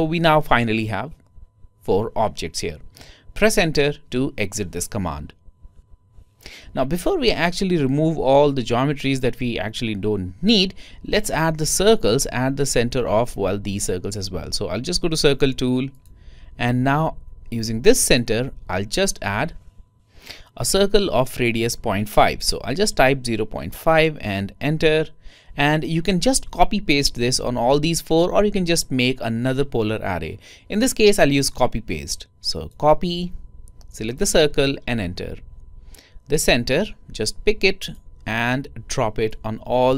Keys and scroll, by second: 22.8-23.6 typing.